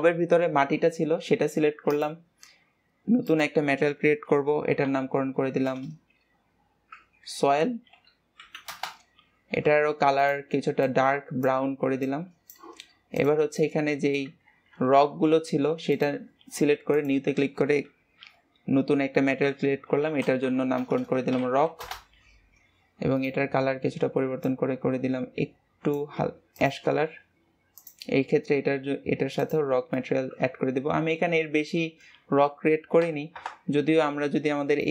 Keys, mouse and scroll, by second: 1.9-5.9 drag, 5.9 BackSpace, 10.1-13.3 drag, 13.6-14.5 middle drag, 14.5 ctrl+s, 15.9-20.9 drag, 20.9 BackSpace, 21.0 BackSpace, 23.1-26.1 drag, 26.5 click, 27.7-29.9 drag, 29.9-33.3 middle drag, 33.3 KP_0.